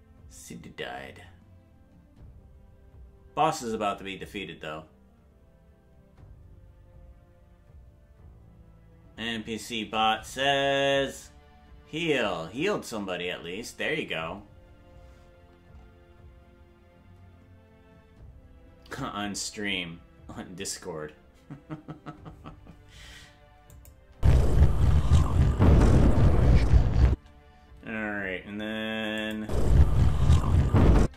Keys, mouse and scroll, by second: 23.7 click, 24.1 space, 27.0 space, 27.4 space, 29.2 click, 29.4 space, 30.9 space.